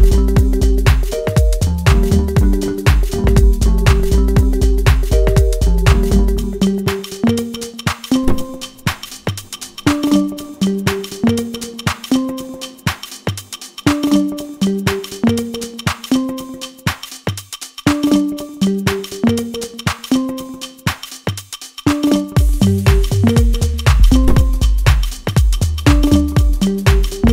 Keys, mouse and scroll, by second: 10.6 click, 12.5-13.2 scroll down 1, 13.2-18.6 middle drag, 18.6 alt+click, 19.4-21.2 middle drag, 21.2-21.6 scroll up 1, 21.6-23.8 middle drag, 23.8-24.2 scroll down 1, 24.2-27.0 middle drag.